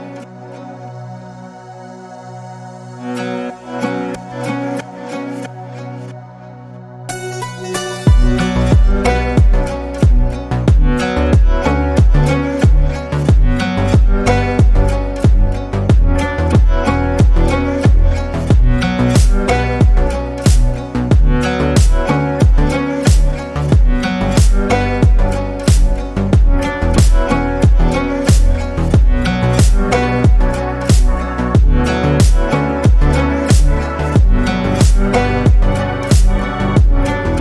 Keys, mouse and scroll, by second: 0.1 ctrl+r, 0.7 shift+middle click, 1.6 click, 3.1 shift+middle click, 3.8 scroll up 1, 4.5 alt+z, 4.9 click, 5.2 alt+z, 5.7 click, 6.7 Tab, 7.0 click, 7.2 scroll down 6, 7.5-9.7 middle drag, 9.7 scroll up 4, 10.0-10.5 shift+middle drag, 10.5 click, 10.7 Tab, 11.4 alt+z, 11.7 click, 12.6 alt+z, 13.0 click, 14.2 Tab, 14.5 click, 14.7 scroll down 2, 14.8-15.7 middle drag, 15.7 scroll down 1, 15.9-17.7 middle drag, 17.7 KP_7, 18.2-18.6 scroll up 2, 18.6 click, 18.9 Tab, 19.4 alt+z, 19.6 click, 20.2 g, 21.3 shift+middle click, 22.2 alt+z, 22.3 click, 22.6 alt+z, 22.8 click, 23.5 ctrl+z, 23.7 click, 24.0 click, 24.7 g, 26.0 Tab, 26.2-26.8 middle drag, 26.8 alt+z, 27.0 scroll down 1, 27.2 click, 27.6-28.3 middle drag, 28.3-28.8 scroll up 1, 28.8-29.6 middle drag, 29.6 scroll up 1, 29.9 drag, 30.6 click, 33.9 click, 34.1 middle drag, 34.4-34.7 scroll up 3, 34.7 scroll down 1, 34.8-35.1 shift+middle drag, 35.1 click, 35.4 Tab, 36.5 ctrl+r.